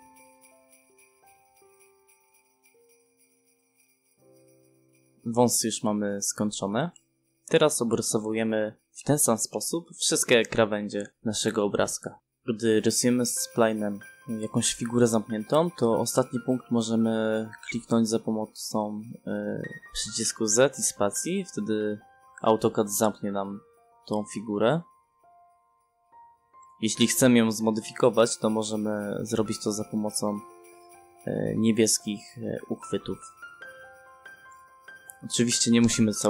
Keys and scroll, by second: 1.2 space, 6.4 space, 10.2 space, 12.9 space, 17.7 z, 18.7 space, 32.4 Escape, 33.9 c, 34.1 space.